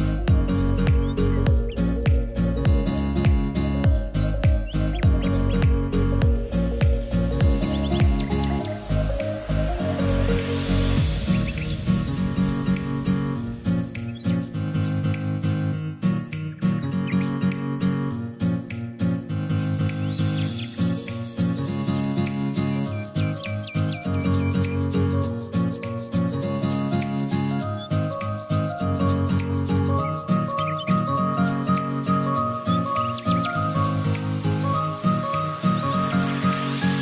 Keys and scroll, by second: 11.6 r.